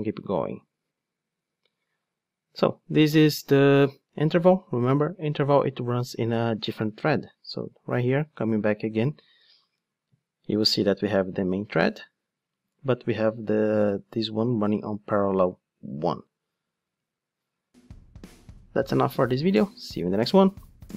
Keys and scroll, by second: 9.4 ctrl+shift+d.